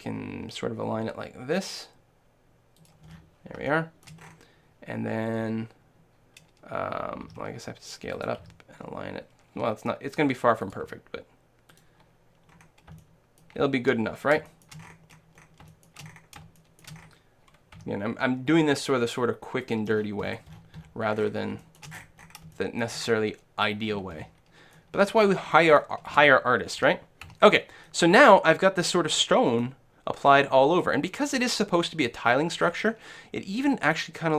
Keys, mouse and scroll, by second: 2.9-4.8 drag, 4.5-7.6 middle drag, 7.4 s, 8.3-10.1 drag, 8.5 g, 10.8-13.7 drag, 10.8 s, 12.6-19.0 middle drag, 17.8 g, 19.8-21.6 drag, 21.2-27.5 middle drag, 26.1 a, 26.9 a, 27.3 a, 27.9-29.6 middle drag, 29.8-31.4 middle drag, 32.6-34.3 middle drag.